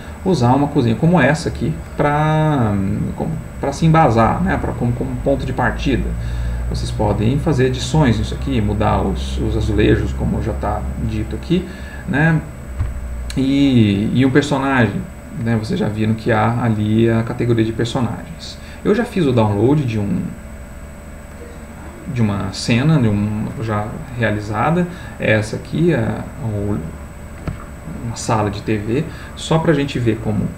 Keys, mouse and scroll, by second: 7.2 click, 9.1 click, 11.1 click, 21.3 click.